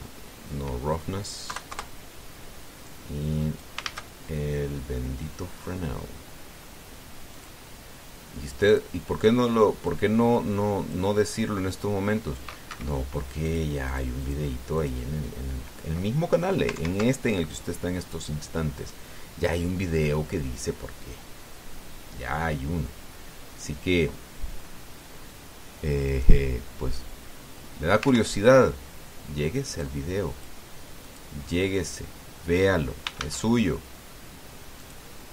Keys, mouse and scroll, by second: 0.4 click, 2.3 KP_0, 2.5 KP_Enter, 3.6 click, 4.6 shift+a, 8.1 click, 9.4 click, 10.6-11.9 drag, 12.5 click, 13.5 Escape, 14.2 click, 14.6 click, 15.0 click, 15.5 click, 17.5 ctrl+Right, 19.5 right click, 26.8 right click, 28.8 ctrl+Left, 30.6 click, 31.8 click, 32.8 scroll down 2, 33.9 shift+a.